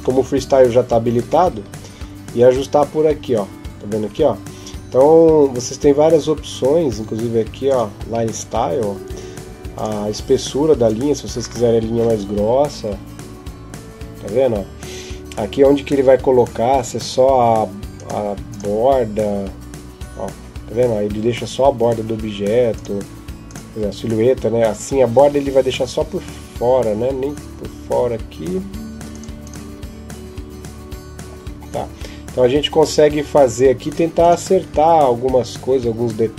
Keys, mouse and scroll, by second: 1.1-2.2 scroll down 14, 7.5 click, 8.0-8.9 scroll down 10, 9.6 click, 10.7 click.